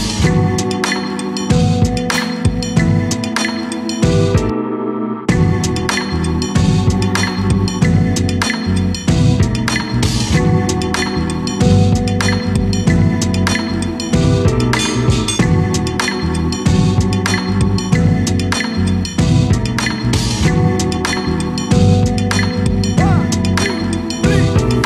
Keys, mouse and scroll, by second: 0.9 e, 3.6 e, 5.0 Tab, 5.5 s, 7.0-8.9 middle drag, 8.9 KP_7, 9.7 KP_Divide, 11.0-11.6 scroll up 2, 11.6-12.7 shift+middle drag, 12.7-14.8 scroll up 2, 14.8 shift+d, 20.5 shift+click, 21.2 shift+click, 21.7-22.7 scroll down 3, 23.4 shift+d.